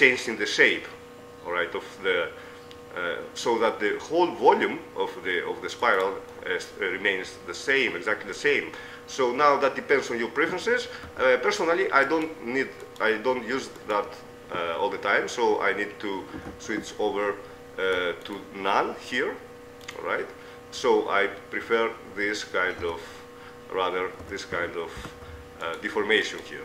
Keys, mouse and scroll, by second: 6.5 middle click, 8.3 middle click, 11.5 Tab, 12.3-15.7 right drag, 18.5-20.1 drag, 20.3-23.1 middle drag, 23.1 Tab, 24.5 Tab, 25.3 z, 25.9 right click.